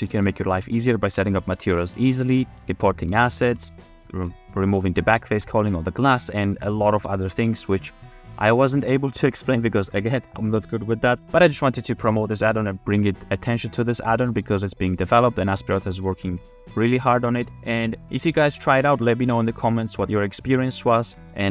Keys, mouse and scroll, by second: 5.4 f, 5.7 middle click, 6.6-7.5 scroll down 1, 6.6 a, 7.1 a, 7.3 a, 7.8-8.1 shift+middle drag, 21.0 click, 21.0 middle click, 21.3 shift+f.